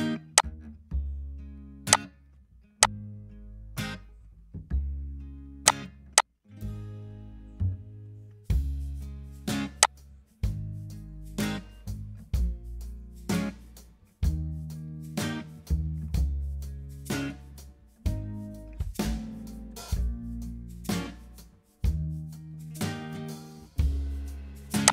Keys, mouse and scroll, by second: 5.0 Delete.